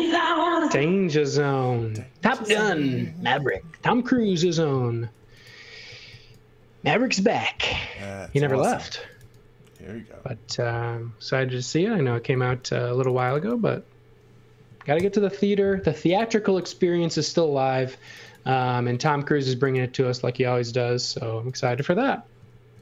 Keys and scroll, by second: 4.1 space, 5.2-6.6 typing, 8.7-10.4 typing, 14.9 shift+w, 18.6 shift+w, 22.5 shift+w.